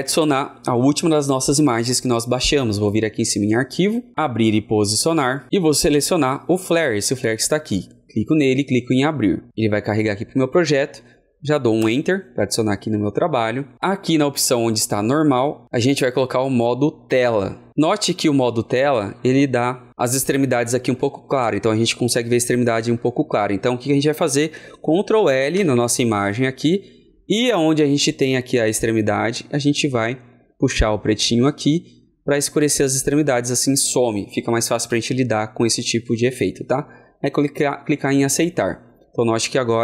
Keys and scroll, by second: 25.4 ctrl+l.